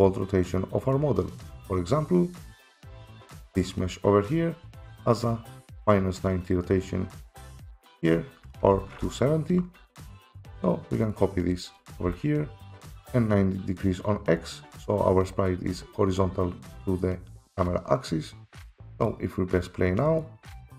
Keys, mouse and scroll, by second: 3.4 click, 8.6 click, 9.7 ctrl+c, 11.1 click, 11.9 ctrl+v, 12.9 F7, 19.1 click, 20.2 click.